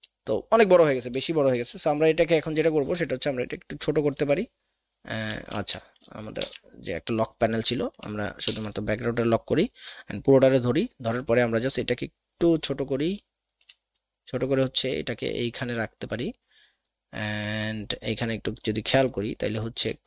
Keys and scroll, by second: 5.5 ctrl+z, 6.4 ctrl+alt+KP_2, 8.4 ctrl+KP_2.